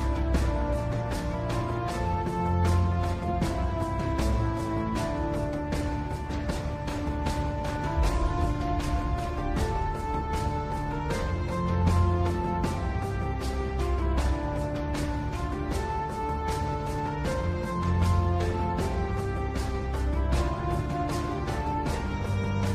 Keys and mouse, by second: 3.5-4.6 drag, 5.7 g, 11.3 z, 13.4 Tab, 15.2-17.1 middle drag, 17.6-19.1 middle drag, 20.9 KP_7.